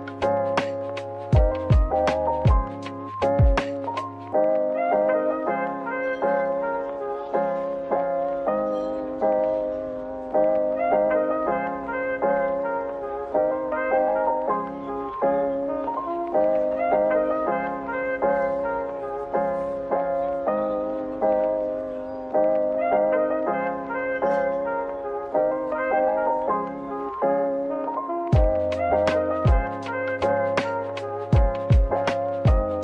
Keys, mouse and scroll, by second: 0.1 middle click, 0.6-1.6 scroll down 1, 2.3 middle click, 3.6 typing, 5.0-5.7 typing, 7.2 middle click, 9.3 middle click, 9.5 shift+click, 10.3 shift+click, 10.4 ctrl+b, 11.3 v, 13.0 middle click, 14.8-15.1 scroll up 1, 15.1 middle click, 19.1 /, 19.7 middle click, 21.7 shift+click, 24.9 middle click, 25.7 p, 26.5 Tab, 27.1 p, 27.2 double click, 30.7 Tab, 31.3 a.